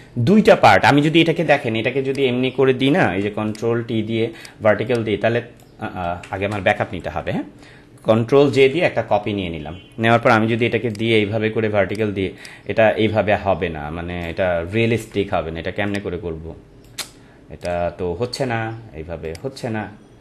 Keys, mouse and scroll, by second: 2.1 click, 3.1 ctrl+t, 3.5 right click, 4.3 click, 6.0 ctrl+z, 7.0 ctrl+z, 10.9 right click, 11.9-14.5 drag, 14.5 Right, 15.8-17.6 drag, 17.6 right click, 19.2-20.2 drag.